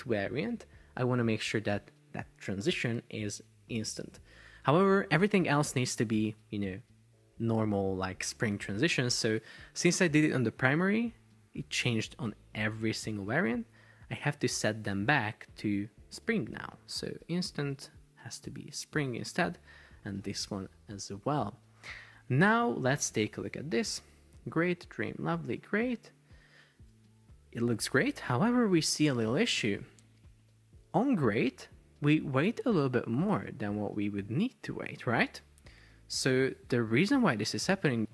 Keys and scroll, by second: 23.8 super+p, 35.6 Escape.